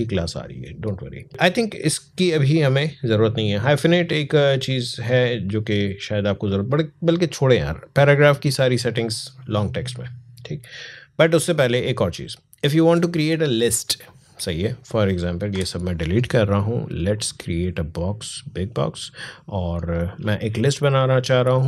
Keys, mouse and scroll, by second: 7.5 click, 9.0-11.2 scroll down 1, 11.2 click, 12.1-12.7 alt+scroll down 1, 13.5 click, 15.3 Delete, 17.0-21.0 drag.